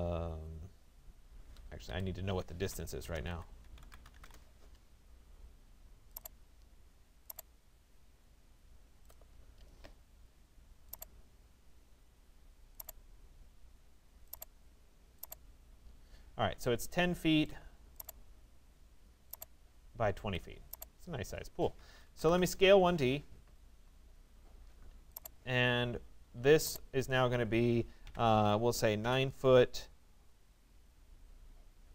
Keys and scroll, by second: 1.5 Escape, 4.3 Return, 16.1 Escape, 22.9 Return.